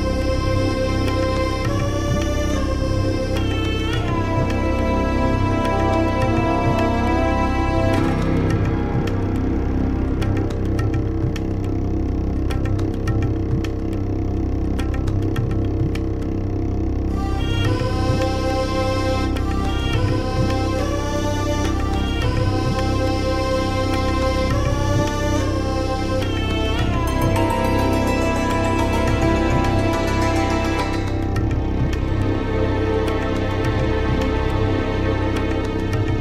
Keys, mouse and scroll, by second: 0.2 scroll down 2, 0.8 click, 1.1-2.9 drag, 4.2 click, 4.4 click, 5.1-7.8 typing, 8.7 click, 9.7 middle click, 10.9-12.6 scroll down 6, 12.9-13.5 scroll down 8, 14.1-14.7 scroll down 2, 14.8 click, 15.6 scroll up 2, 16.3 scroll up 2, 16.7 click, 18.0-19.6 drag, 20.4 click, 20.8-21.8 typing, 22.8 click, 24.1 click, 25.9-26.5 scroll up 4, 27.7-28.0 scroll up 4, 28.5 click, 28.8-30.5 drag, 30.6 scroll down 1, 30.9 scroll up 1, 31.9 click, 33.0 scroll down 1, 33.1-33.5 scroll up 1, 33.5 click, 34.3 click, 34.5-35.6 drag.